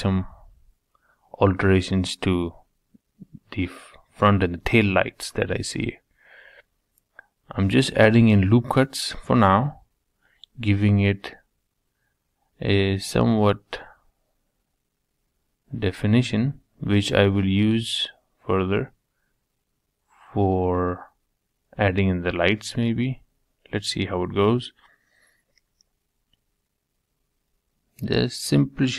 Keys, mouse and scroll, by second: 10.0-14.5 middle drag, 14.5 ctrl+r, 24.3-26.3 middle drag.